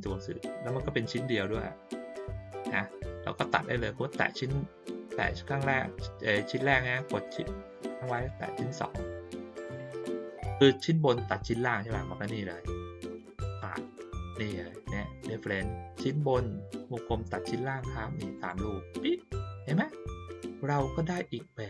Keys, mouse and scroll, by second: 0.0 click, 8.1 shift+click, 13.4 click, 18.3 click.